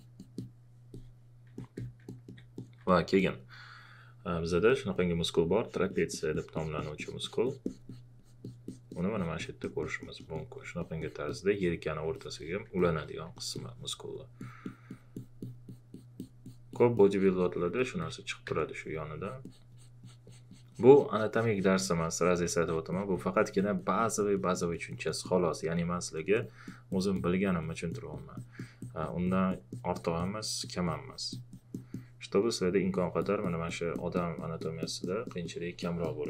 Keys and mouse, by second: 2.1 alt+click, 18.5 click, 19.2 click.